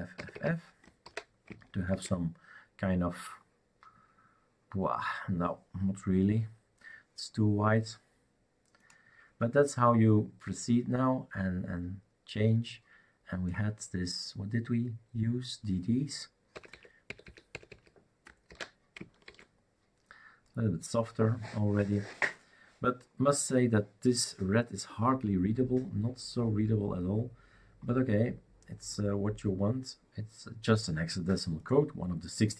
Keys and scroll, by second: 1.0 ctrl+s, 1.0 typing, 2.0 shift+super+r, 16.5-17.2 typing, 18.5 ctrl+s, 18.5 typing, 19.4 shift+super+r.